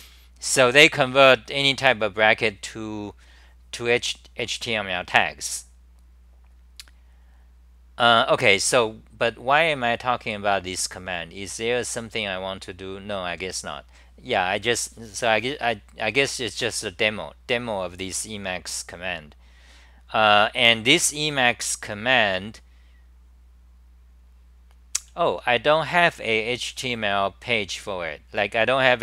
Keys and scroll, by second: 5.2-7.7 scroll down 3, 5.3 typing, 7.7-9.1 scroll down 1, 9.5-10.5 scroll down 5, 10.5-11.5 scroll down 3, 11.6-14.5 scroll down 2, 17.6-18.9 scroll down 7, 18.9-21.8 scroll down 9, 21.8 t, 22.0 t, 22.2 t, 25.0 t, 25.3 t.